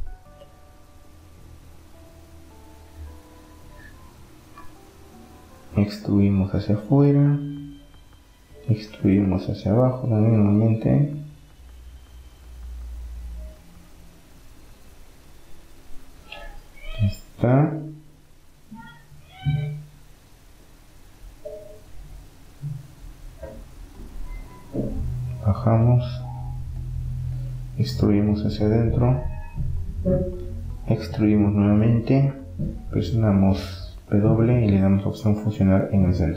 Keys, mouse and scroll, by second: 1.1-4.0 middle drag, 3.4 e, 4.8 s, 7.7 e, 8.6-10.6 drag, 14.6-19.8 middle drag, 24.1-26.1 drag, 25.7 e, 27.1 s, 30.5 e, 31.1 s, 32.6-33.7 middle drag, 34.1 w.